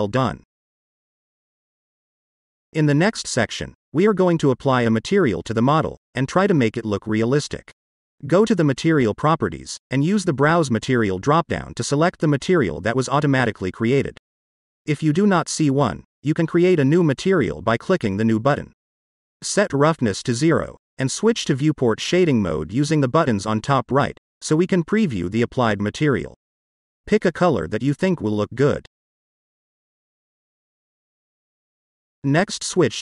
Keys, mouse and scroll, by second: 2.0-2.4 scroll down 1, 2.4-2.8 middle drag, 3.0-3.6 scroll down 3, 3.6-4.4 middle drag, 4.7-5.1 scroll down 2, 5.1-5.6 middle drag, 7.1-7.9 scroll up 1, 7.9 scroll up 1, 9.2 click, 10.6 click, 11.4-12.1 drag, 18.4-21.0 drag, 22.2 click, 22.8-25.7 middle drag, 26.7 click.